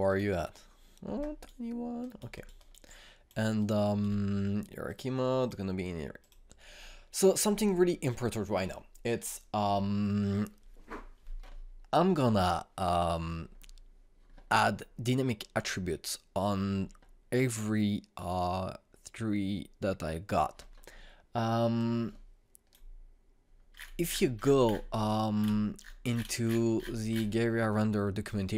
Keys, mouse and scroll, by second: 0.7 click, 1.8 alt+right click, 3.4 alt+click, 4.2-5.5 alt+right drag, 5.5 click, 22.4-24.3 drag, 24.3-26.7 scroll up 1.